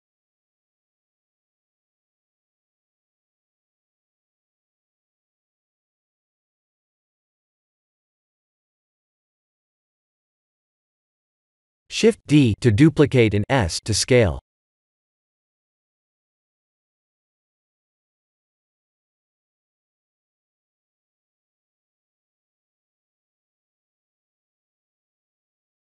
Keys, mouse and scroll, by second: 0.4 click, 1.5 s, 4.4 click, 8.5-9.0 scroll up 1, 9.0 middle click, 9.0-10.3 scroll up 2, 10.3 click, 10.9 KP_1, 11.3 KP_7, 12.7 shift+d, 15.1 middle click, 15.8-17.8 scroll down 1, 17.8 middle click, 17.8 scroll down 1, 19.1 KP_7, 19.8 s, 22.5 middle click, 24.5 click.